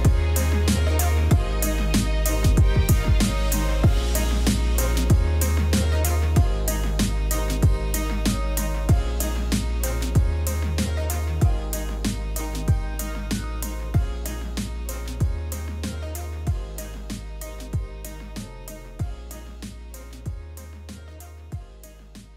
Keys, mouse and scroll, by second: 0.0 Return, 2.2 click, 2.7 ctrl+z, 2.9 click, 3.3-8.8 typing, 3.3 scroll down 2, 3.6-4.1 scroll up 2, 4.2 click, 4.4 click, 4.9 Return, 6.7 ctrl+z, 6.9 Return, 8.2 ctrl+alt+middle click, 10.3-13.7 typing, 11.0 ctrl+z, 13.9 ctrl+s, 15.3 shift+click.